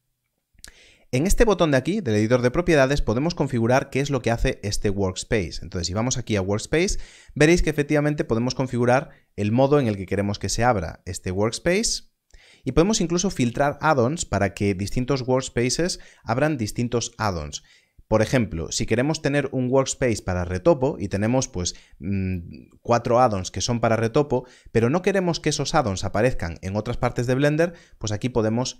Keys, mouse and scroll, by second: 2.2 click, 5.6 click, 8.0 click, 11.2 click.